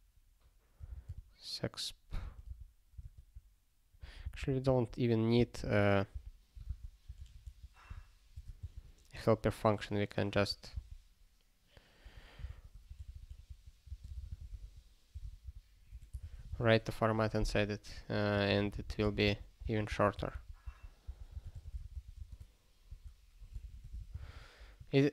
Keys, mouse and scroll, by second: 0.9-2.7 typing, 3.0 alt+/, 4.2 alt+b, 4.4 alt+b, 6.7 Return, 7.2 alt+f, 7.4 alt+f, 7.8 m, 8.3 BackSpace, 8.6 Return, 10.4 alt+f, 10.7 alt+b, 12.5 ctrl+s, 12.9 alt+f, 13.1 alt+f, 13.8-16.7 typing, 17.9 ctrl+p, 18.3 ctrl+n, 18.7 alt+b, 18.8 alt+b, 20.2 alt+d, 20.3 alt+d, 21.1-23.8 typing.